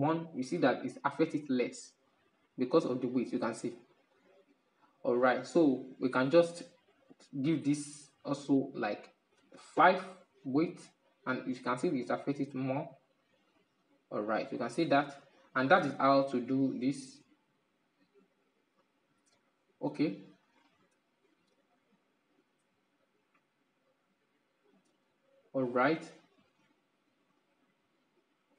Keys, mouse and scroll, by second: 1.0-6.2 drag, 6.2 right click, 6.8 right click, 7.9-13.6 drag, 14.3-18.9 drag, 18.9-21.2 middle drag, 21.2-27.6 drag, 27.6-28.5 middle drag.